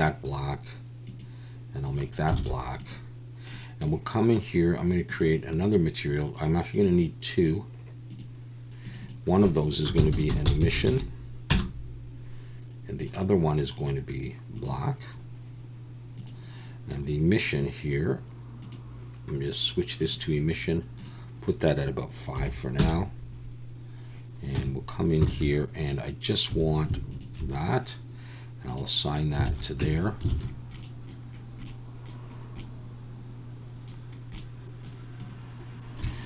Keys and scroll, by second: 2.5 alt+a, 10.6 s, 24.6 Tab, 25.3 alt+a, 26.5 3, 29.5 alt+a, 29.9 Tab, 30.4 alt+a.